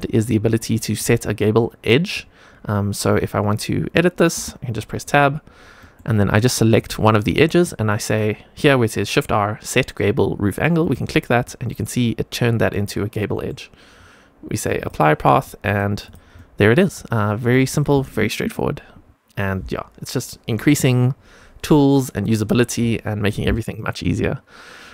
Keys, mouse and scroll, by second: 0.6 middle click, 1.5-2.0 middle drag, 4.3 Tab, 5.7 middle click, 6.7 click, 10.7 click, 11.4 middle click, 12.4 middle click, 13.2 middle click, 14.7 click, 15.1 middle click, 15.6 click, 15.9 click, 16.3-17.4 middle drag.